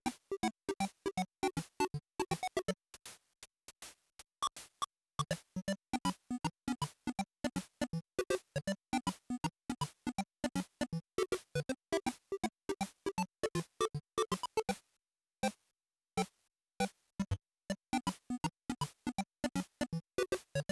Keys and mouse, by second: 5.0-6.4 drag, 9.2-10.8 drag, 16.6-20.7 drag.